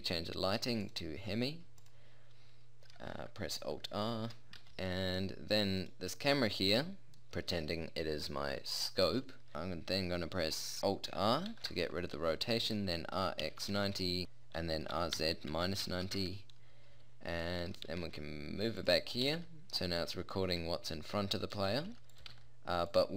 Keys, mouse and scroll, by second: 4.3 alt+r, 4.6 a, 5.8-6.8 drag, 11.6 alt+r, 13.2 r, 14.2 ctrl+z, 14.2 r, 15.0 r, 17.5 middle click, 17.9 g, 19.2 g, 20.4 middle click, 21.7 g, 22.3 g.